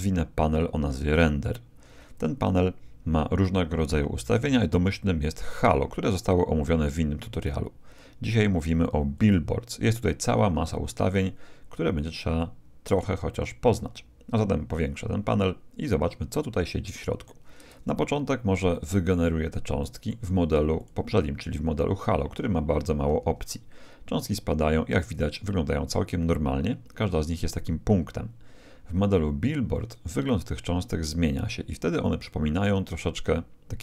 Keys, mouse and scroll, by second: 1.1-2.9 drag, 2.1-4.0 middle drag, 9.1-11.1 drag, 12.4-14.1 drag, 13.4-15.3 middle drag, 16.1-18.1 scroll up 1, 18.1-18.7 scroll up 1, 18.7-20.8 middle drag, 20.8-22.7 drag, 20.8 right click, 22.7 middle click, 23.2 alt+a, 25.0 alt+a, 26.5-29.5 middle drag, 29.7-31.5 drag, 32.2-33.8 middle drag.